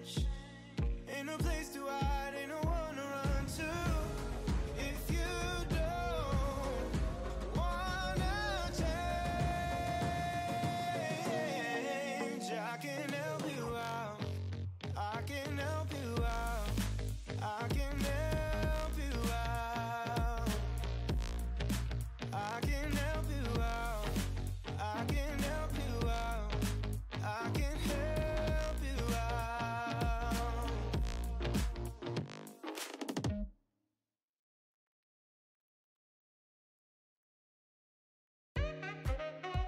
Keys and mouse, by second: 0.4 click, 2.2 click, 2.9 shift+click, 3.2 shift+drag, 3.4 shift+click, 3.6 middle click, 3.8 shift+drag, 4.2 shift+middle click, 4.7 middle drag, 5.1 shift+click, 5.2 shift+middle click, 5.7 shift+drag, 6.3 middle drag, 6.6 shift+middle click, 7.2 middle drag, 7.4 shift+middle drag, 8.4 ctrl+l, 9.8 middle click, 10.2 ctrl+s, 10.8 shift+middle click, 12.7 click, 15.9 click, 16.2 shift+middle click, 16.6 middle click, 16.8-18.3 shift+middle drag, 18.3 click, 18.9 ctrl+v, 19.3 click, 23.2 click, 23.7 middle click, 24.7 click, 25.1-26.6 drag, 26.8 click, 28.0 click, 28.5 shift+click, 29.2-30.0 shift+drag, 30.3 shift+click, 32.3 middle drag, 33.0-34.0 shift+drag, 34.8 shift+click, 35.3 ctrl+l, 36.3 click, 36.9 click, 39.1-39.6 shift+drag.